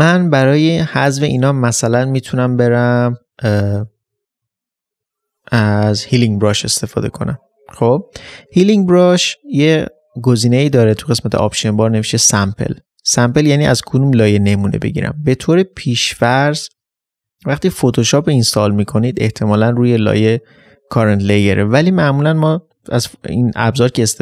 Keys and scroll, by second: 0.6 ctrl+space.